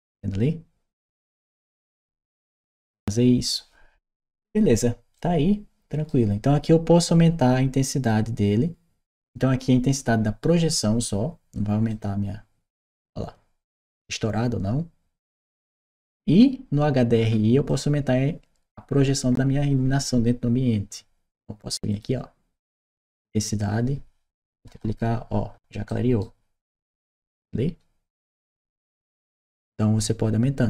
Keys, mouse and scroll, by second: 2.4 right click, 4.9 right click, 11.7-15.1 drag, 15.8 click, 17.5 click, 21.7 click, 22.6 click, 24.4 2, 25.6 Return, 25.6 right click, 26.9-28.2 right drag.